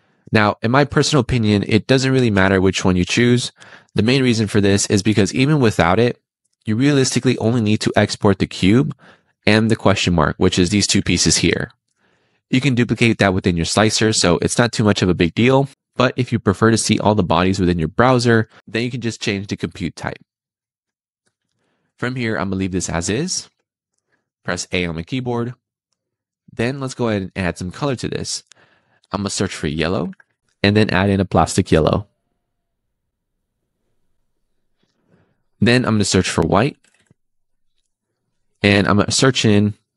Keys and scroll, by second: 3.9 super+z, 21.1 Escape, 24.6 a, 36.8 e.